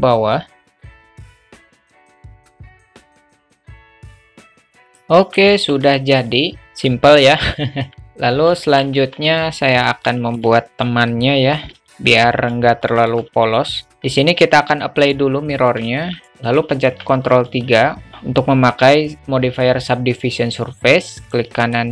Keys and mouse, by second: 0.7 a, 0.7 click, 0.7 a, 0.9 alt+z, 1.0 click, 1.0 a, 1.3 click, 1.4 shift+middle click, 1.5 click, 1.7 ctrl+z, 1.7 click, 1.8 click, 2.0 Tab, 2.1-4.1 typing, 2.2 Tab, 2.6 click, 2.7 alt+Tab, 2.7 alt+middle click, 2.9 click, 3.0 alt+middle click, 3.0 click, 3.2 alt+Tab, 3.2 alt+middle drag, 4.0 click, 4.1 middle click, 4.3 click, 4.5 alt+middle click, 4.7 middle click, 4.9 alt+middle click, 5.0-5.4 alt+middle drag, 7.5-8.0 alt+middle drag, 8.6 shift+middle drag, 10.1 alt+shift+middle drag, 11.1 click, 12.8 alt+shift+middle drag, 15.0-15.8 drag, 16.0 alt+middle click, 16.8 ctrl+3, 17.6-18.1 alt+middle drag, 18.1 Tab.